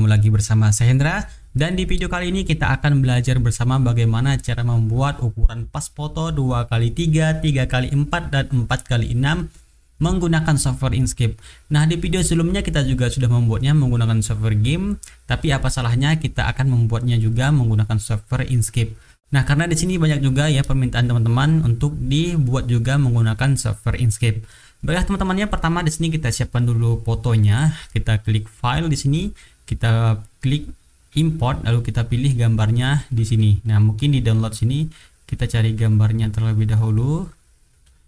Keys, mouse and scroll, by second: 26.5-27.3 middle drag, 28.7 click, 31.0 click, 33.6 click, 36.6-38.0 drag.